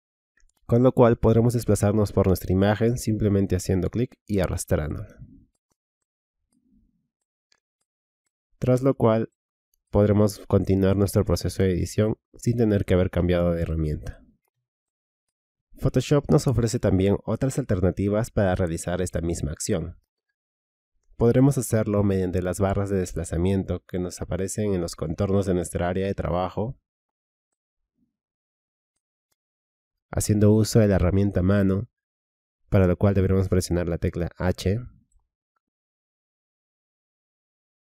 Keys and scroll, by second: 34.3 h.